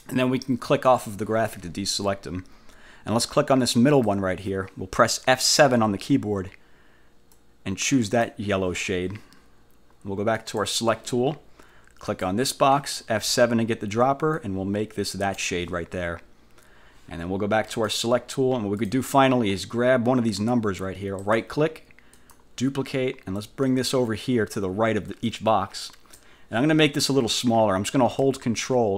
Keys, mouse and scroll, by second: 1.0 click, 4.0 click, 5.8 F7, 7.4 click, 10.4 click, 12.2 click, 13.3 F7, 14.4 click, 17.8 click, 18.9 click, 21.3 middle click, 22.2 click, 23.4-26.5 drag.